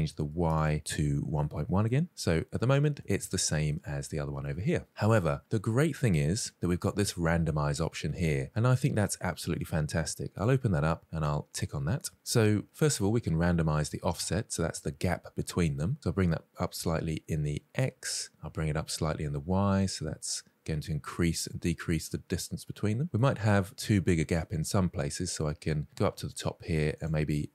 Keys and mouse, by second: 0.3-1.4 drag, 2.0-2.3 middle drag, 2.7 shift+middle drag, 3.0 middle click, 9.8 click, 10.8 click, 15.4-22.8 drag, 23.1-23.6 middle drag, 24.2 middle click, 26.7-27.5 drag.